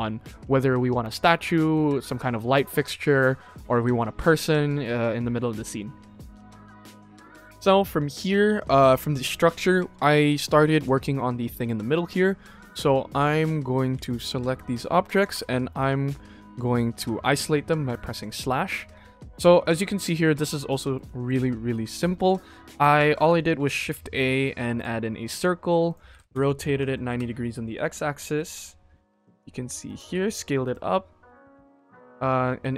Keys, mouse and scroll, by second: 1.3 shift+middle drag, 2.0 middle click, 3.1 shift+middle drag, 3.6 middle click, 4.6 shift+middle drag, 6.9 ctrl+s, 6.9 click, 10.7 click, 12.5 right click, 15.2 /, 16.9 /, 18.1 click, 18.6 shift+middle drag, 19.0-19.3 scroll up 1, 19.4 ctrl+s, 19.5-20.0 middle drag, 20.3 scroll down 1, 20.4 shift+middle drag, 21.0 middle drag, 21.3-21.8 scroll up 2, 21.8 click, 22.2-22.7 scroll down 4, 22.7 click, 23.0 shift+middle click, 23.7 shift+a, 25.3 s, 26.0 r, 27.8-30.6 typing, 31.6 Tab, 32.2 middle click.